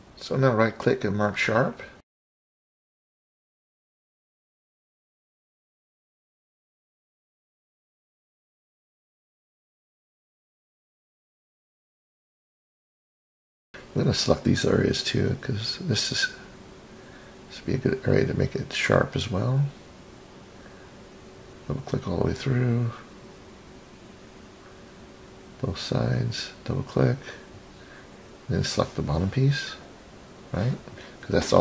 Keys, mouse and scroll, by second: 2.8 right click, 3.6-4.1 middle drag, 4.5 middle click, 5.2 click, 5.4 click, 6.4-7.9 right drag, 9.5 click, 9.7 click, 10.3-10.6 scroll down 3, 10.7 click, 12.3-13.0 scroll up 6, 15.5 click, 15.7 click, 17.7 shift+click, 17.9 shift+click, 19.4 shift+click, 19.6 shift+click, 20.5 shift+click, 20.7 shift+click, 21.5 shift+click, 21.8 shift+click, 22.3-23.1 scroll down 5, 23.1-24.0 middle drag, 24.4 scroll up 2, 25.4 shift+click, 25.6 shift+click, 26.2-26.5 scroll down 3, 26.7-27.9 middle drag, 29.0 shift+click, 29.9-30.5 scroll up 2, 30.5 scroll up 1, 30.7-31.0 right drag.